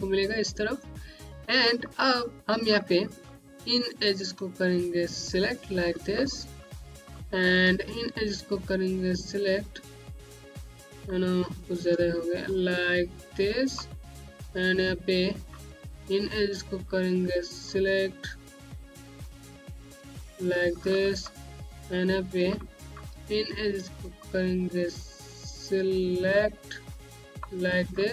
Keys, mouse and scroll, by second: 0.7 scroll down 1, 1.7 alt+middle click, 2.4 middle click, 2.7 scroll up 1, 3.1 click, 4.0 click, 5.2 click, 5.7-6.0 scroll down 1, 6.1 middle click, 7.1-7.5 scroll up 1, 9.0 shift+click, 9.8 scroll up 1, 10.7 alt+middle click, 11.2 z, 12.4 shift+click, 13.4 shift+click, 13.7-14.1 scroll down 1, 14.2 click, 17.5 click, 19.5 click, 20.2 scroll down 1, 20.7 middle click, 21.3 scroll up 1, 21.7 middle click, 24.4 shift+click, 26.6 click, 27.5 scroll down 1, 27.9 click.